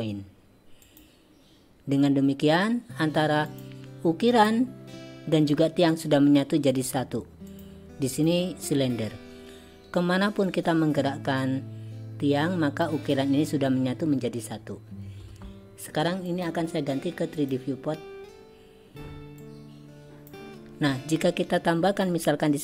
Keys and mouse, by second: 3.6 click, 4.4 click, 6.8 click, 7.6 drag, 8.2 click, 10.6-12.9 drag, 16.3-17.6 drag, 19.6 click, 22.1 drag.